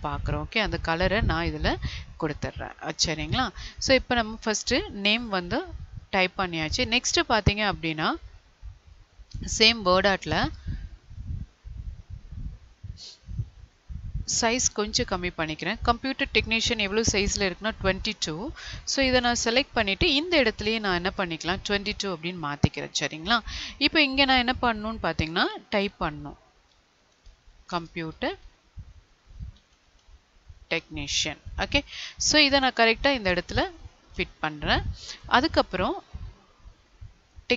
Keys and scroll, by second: 25.0 ctrl+a, 27.6 space, 27.8 space.